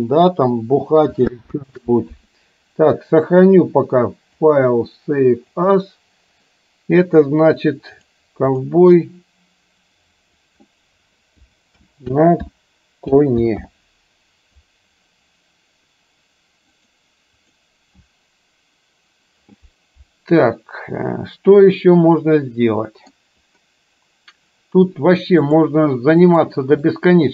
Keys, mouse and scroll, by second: 1.6 space, 4.6-6.0 drag, 20.5-23.2 middle drag, 25.5-26.6 drag, 27.0-27.3 middle drag.